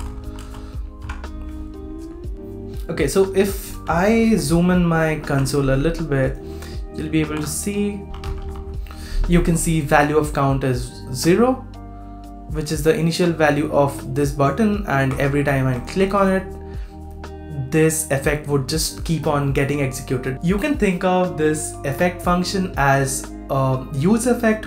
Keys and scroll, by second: 1.0 super+s, 4.2 shift+super+=, 4.6 shift+super+=, 4.8 shift+super+=, 7.2 super+r.